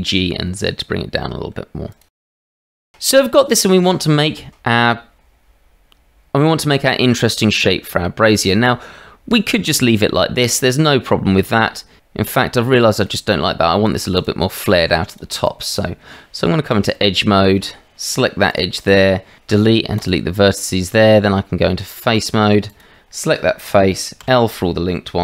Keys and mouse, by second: 2.1 Tab, 2.4 shift+z, 8.0 shift+middle drag, 9.8-11.3 drag, 11.6 Tab, 13.0-13.4 drag, 13.6 shift+middle drag, 14.1 click, 14.7 middle drag, 16.0 Tab, 16.9 shift+middle click, 18.5 alt+click, 19.4 Delete, 20.5 click, 21.2 Tab, 24.2 l.